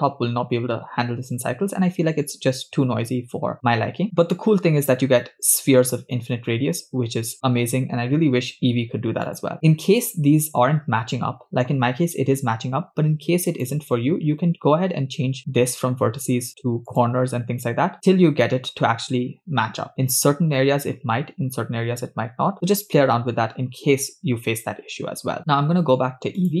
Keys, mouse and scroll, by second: 9.3 click, 13.6-17.3 drag, 24.6-25.3 scroll down 8, 25.4-26.6 drag.